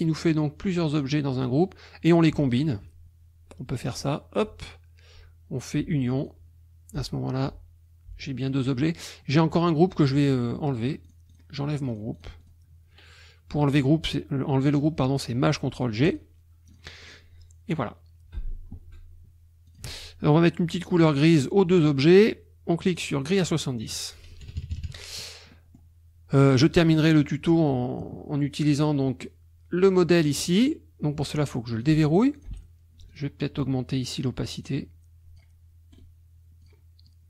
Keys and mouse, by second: 0.9 click, 2.1 click, 2.4 shift+click, 3.9 click, 6.2 click, 8.4 click, 11.0 click, 11.9 click, 16.1 click, 16.7 click, 17.0 click, 19.7 shift+click, 22.9 click, 23.9 click, 24.5 KP_Subtract, 25.5 middle click, 26.5 middle click, 26.8 middle click, 30.4 click, 31.7 click, 32.4 click, 33.1 click, 34.6 click, 35.9 right click, 36.6 click, 37.1 click.